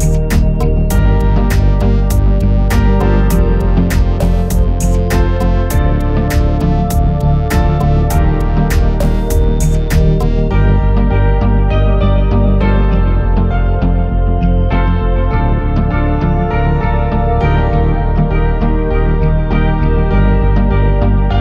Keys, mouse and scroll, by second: 1.9 click, 3.0-3.8 middle drag, 4.1 click, 5.7 click, 6.9 click, 11.6-12.7 drag, 14.1 ctrl+r, 15.9 click, 16.9 s, 17.5 x, 18.5 right click, 19.3 s, 19.6 x, 20.8 click, 21.3 middle click.